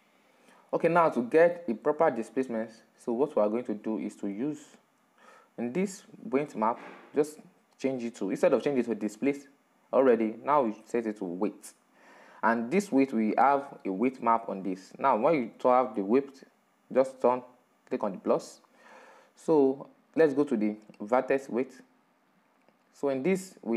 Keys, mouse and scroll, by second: 0.4-0.9 scroll up 3, 0.9-1.6 middle drag, 1.6-2.0 scroll down 3, 2.0-11.4 middle drag, 11.4 click.